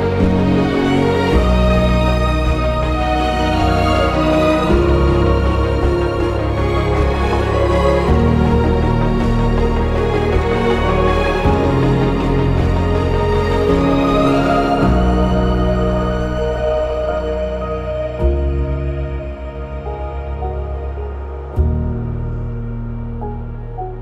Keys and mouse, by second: 0.7 g, 0.9 g, 2.4 click, 3.1 click, 3.8 g, 4.0 g, 4.9 Tab, 8.6 Tab, 8.6 click, 9.4 g, 9.6 g, 11.3 click, 15.2 shift+click, 16.0 g, 19.8 click, 20.8 g, 21.6 click, 22.4 ctrl+b.